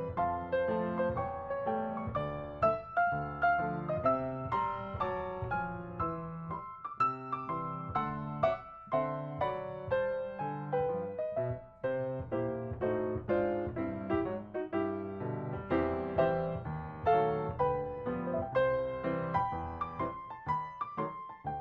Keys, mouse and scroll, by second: 0.0-0.2 typing, 0.5 ctrl+d, 1.1 ctrl+shift+click, 3.0 double click, 3.4 shift+scroll down 4, 3.8-4.8 typing, 6.4 typing, 10.3 typing, 11.0 ctrl+scroll up 1, 11.6 space, 12.2 ctrl+scroll up 1, 17.1 ctrl+click, 18.0 ctrl+click, 18.4 ctrl+click, 18.9 ctrl+click, 19.2 ctrl+click, 19.6 s, 20.0 ctrl+click, 21.1 ctrl+shift+click, 21.4 ctrl+-.